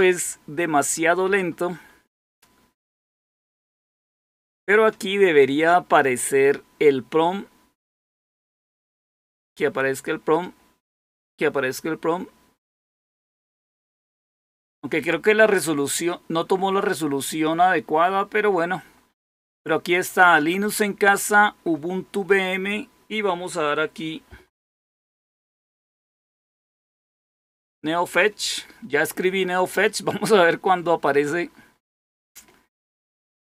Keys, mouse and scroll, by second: 24.6-27.3 typing.